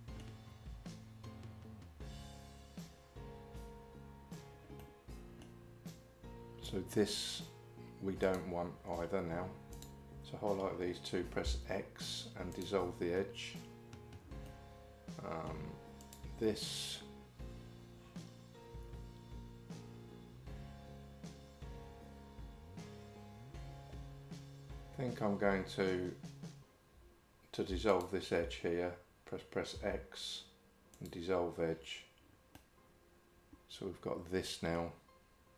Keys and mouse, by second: 4.9 middle click, 11.5 x, 14.5-15.5 middle drag, 16.0 click, 27.9 alt+click, 29.8 x, 32.6-34.8 middle drag.